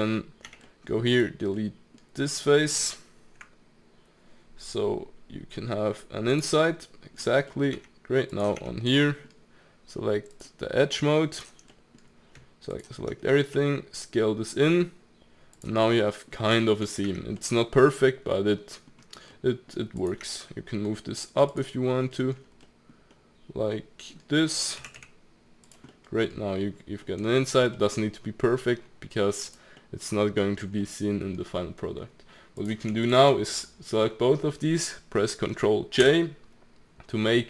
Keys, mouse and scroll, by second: 0.4 Tab, 0.6-1.1 middle drag, 1.1 click, 1.5-3.4 middle drag, 3.4 Delete, 6.8 middle click, 7.3 scroll up 2, 7.5 middle click, 7.7 Tab, 8.3 click, 8.6 Tab, 9.0 middle click, 9.3-9.8 scroll down 1, 9.8-10.3 scroll down 1, 10.3-11.4 drag, 11.7-12.7 middle drag, 12.7 alt+click, 13.5 s, 15.7-17.0 middle drag, 17.0 Tab, 17.4-18.9 middle drag, 18.9-19.3 scroll up 3, 19.3-19.9 middle drag, 19.9 click, 20.2 Tab, 21.5 alt+click, 22.0-22.5 middle drag, 22.5 scroll up 1, 22.6-23.0 middle drag, 23.0 scroll up 1, 23.1-24.8 middle drag, 24.8 g, 25.9 middle click, 26.3-27.0 scroll down 2, 27.0 middle click, 27.3 Tab, 27.5 scroll down 2, 27.7 middle click, 28.6-29.5 scroll down 1, 29.5 click, 29.7-30.5 middle drag, 30.5-30.8 scroll up 1, 30.8-32.6 middle drag, 32.6 click, 33.0 shift+click, 36.0 ctrl+j.